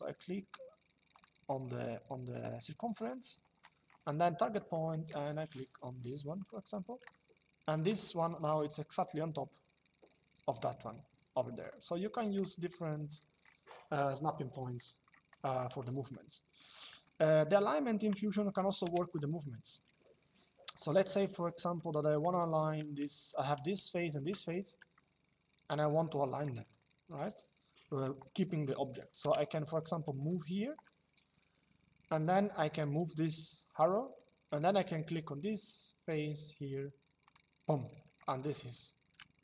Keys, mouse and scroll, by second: 0.8 click, 2.7 click, 4.4 middle click, 6.1 click, 11.3 click, 14.5 middle click, 18.3-19.0 typing, 20.5 shift+middle click, 22.8 Escape, 23.2 click, 24.6 shift+middle click, 26.3 click, 28.9 m, 29.9 click, 32.2 click, 36.9 click, 39.0 middle click.